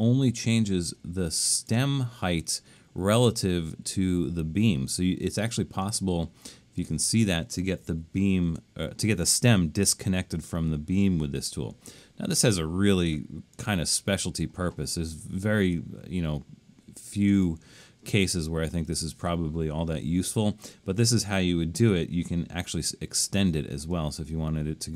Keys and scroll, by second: 8.0 super+=, 20.0 BackSpace.